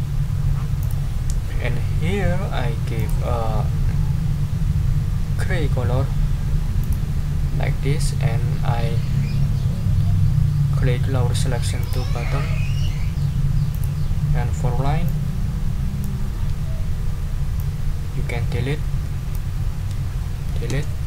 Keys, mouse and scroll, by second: 0.8 click, 3.0 middle click, 3.5-4.1 scroll down 2, 6.8 click, 11.8 click, 12.8 click, 13.7 click, 15.0-16.2 drag, 17.6-19.5 drag, 20.7 Delete.